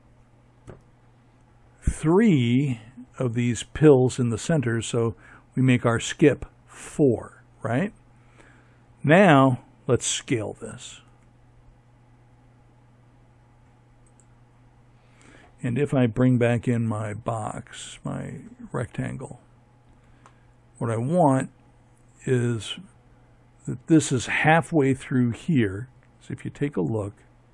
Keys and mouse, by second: 8.9 s, 15.8-18.1 drag.